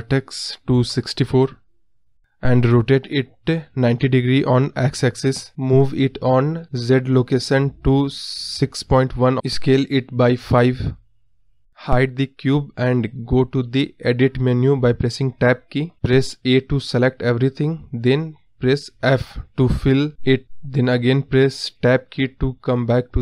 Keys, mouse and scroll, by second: 1.7-11.9 drag, 11.9-13.0 middle drag, 13.0 click, 13.3 scroll up 2, 13.5 scroll down 2, 13.5-14.4 middle drag, 14.4 KP_1, 15.5 Tab, 16.7 a, 18.6 f, 20.7 Tab, 22.1 click, 22.6 scroll up 1, 22.8 middle click.